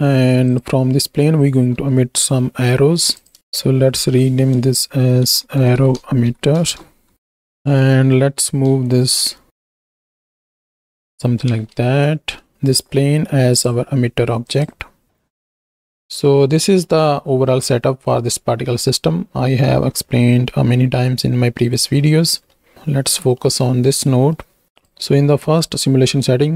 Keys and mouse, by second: 1.8 s, 3.1 click, 4.0 F2, 5.7 r, 8.0 ctrl+space, 8.0 t, 8.0 ctrl+click, 8.8-9.1 shift+drag, 9.6-10.8 typing, 11.7 ctrl+space, 12.5 z, 13.6-15.2 drag, 16.0 click, 16.9 middle click, 22.4 middle click, 23.4 middle click, 24.1 middle click, 24.6 ctrl+z, 24.7 click.